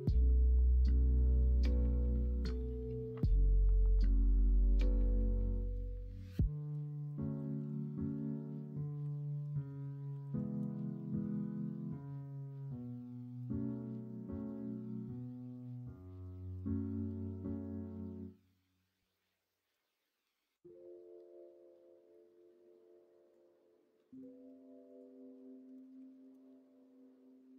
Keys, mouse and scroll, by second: 2.0 middle click, 3.3 middle click, 7.5 Left, 7.5-12.6 drag, 7.9 Right, 10.5 Right, 12.6-16.2 middle drag, 16.8-18.1 middle drag, 18.4 middle click, 25.8-27.2 drag, 25.8 BackSpace, 27.2 middle click.